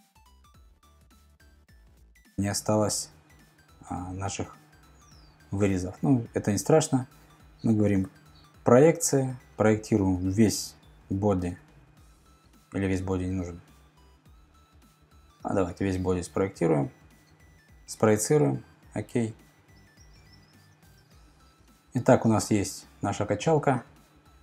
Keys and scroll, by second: 8.0 p.